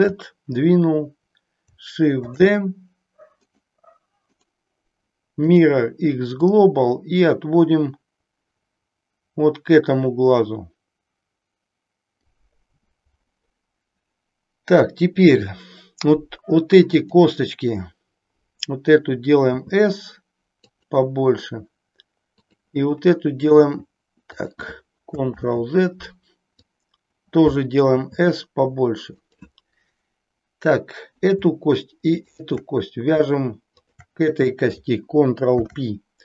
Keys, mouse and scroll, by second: 2.2 shift+d, 3.6 right click, 4.2-5.7 right drag, 6.4-12.1 drag, 14.7 click, 19.5 s, 22.3 click, 23.6 s, 25.3 ctrl+z, 26.7 click, 27.9 s, 29.2 click, 32.2 shift+click, 35.4 ctrl+p.